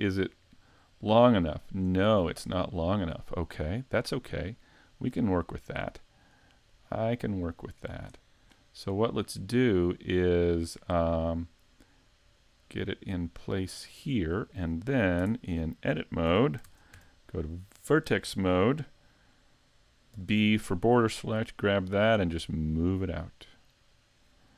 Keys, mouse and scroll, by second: 0.2 click, 2.1 scroll up 2, 2.5 shift+middle click, 5.3 shift+middle click, 6.7 click, 9.6 click, 12.4 click, 15.2 Tab, 16.3 a, 16.6 ctrl+Tab, 20.2 b, 22.6 click.